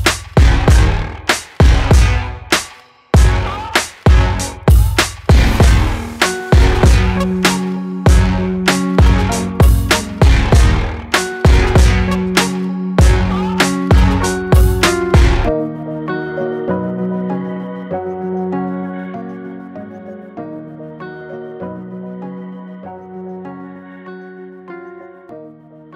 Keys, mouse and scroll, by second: 2.9-3.9 middle drag, 3.9 scroll up 1, 4.2-4.5 middle drag, 4.5 scroll down 3, 5.2-5.5 middle drag, 5.5-6.0 scroll up 2, 6.4 s, 7.4 click, 7.7 scroll down 1, 7.9-9.8 middle drag, 11.1 Tab, 11.4 Tab, 11.5 click, 11.8 Tab, 12.8 click, 13.9 g, 23.2 Tab, 23.4-25.4 middle drag.